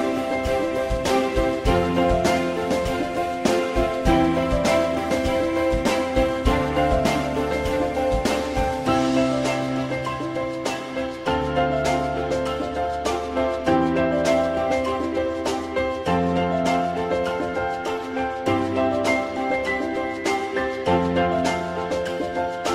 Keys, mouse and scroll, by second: 1.3-3.0 alt+middle drag, 6.8 click, 8.0 click, 12.0-13.0 typing.